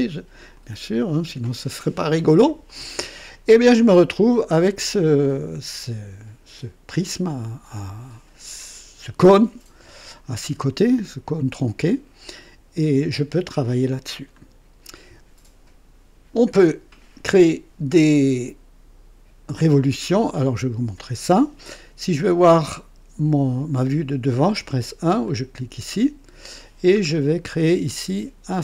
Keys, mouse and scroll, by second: 0.5 click, 2.6-4.7 drag, 5.2-7.9 drag, 10.8-12.5 drag, 25.2 click, 27.0-27.5 scroll up 2.